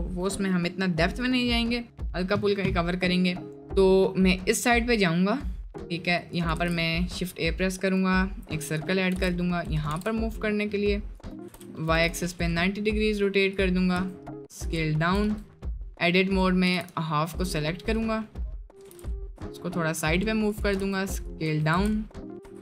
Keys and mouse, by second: 3.7-4.5 middle drag, 4.9-5.3 middle drag, 5.7 click, 6.6 shift+a, 9.1 g, 9.9 r, 11.4 r, 13.5 click, 14.0 s, 15.0 shift+click, 15.3 Tab, 15.7 click, 16.7 g, 18.7 g, 20.8 s, 21.5 Tab, 21.7 a, 22.5 ctrl+z.